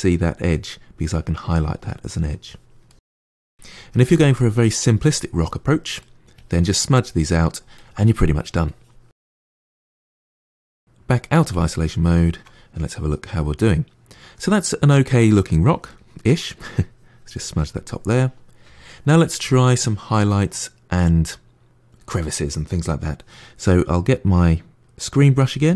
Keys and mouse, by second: 1.0 click, 1.7 middle click, 2.4 click, 2.8 middle click, 3.0 click, 3.2 middle click, 3.3 click, 3.9 middle click, 4.0 click, 4.4 middle click, 4.6 click, 4.8 middle click, 5.0 click, 5.3 middle click, 5.4 click, 5.9 middle click, 6.0 click, 6.3 middle click, 6.4 click, 6.7 middle click, 6.8 click, 7.1 middle click, 7.2 click, 7.4 middle click, 7.7 click, 8.1 middle click, 8.4 click, 8.5 middle click, 8.7 click, 9.4 middle click, 9.6 click, 9.7 middle click, 10.4 KP_Divide, 10.6-16.6 middle drag, 16.6-18.0 drag, 18.0-19.3 middle drag, 19.3 click, 23.5 f, 25.4-25.7 middle drag.